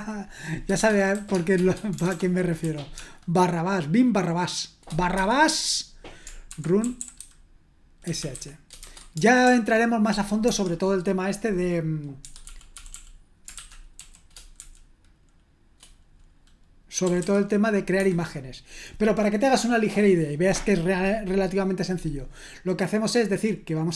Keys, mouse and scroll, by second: 0.7-2.9 typing, 5.2 typing, 6.2-9.4 typing, 10.4 Escape, 12.2 Escape, 12.4-14.5 typing, 16.8-17.6 typing, 17.9 Escape.